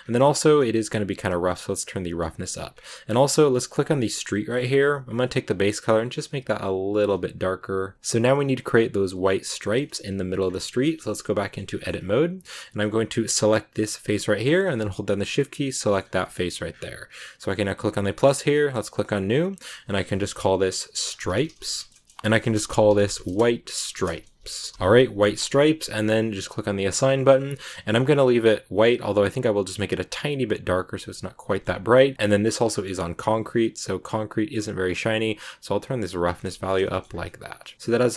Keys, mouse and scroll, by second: 1.1-2.6 drag, 2.6-3.0 scroll up 7, 3.7 click, 4.3-5.2 scroll down 3, 5.2 click, 7.9-9.7 scroll up 2, 9.7 middle click, 10.0 Tab, 11.2 middle click, 11.8-13.2 scroll down 1, 13.3 right click, 15.4 shift+right click, 15.7 middle click, 16.1 shift+scroll down 1, 16.6 scroll up 1, 17.5-21.9 drag, 25.3-26.6 middle drag, 26.6 click, 27.0-28.8 middle drag, 28.8 click, 31.3-32.1 scroll up 3, 31.3 middle click, 32.1 scroll down 2, 32.5 middle click, 33.3-33.9 scroll down 4, 34.6-36.4 drag, 36.4 Tab, 36.5-37.1 scroll down 3, 36.8 shift+middle click, 37.1 scroll up 1, 37.7-38.1 scroll up 1.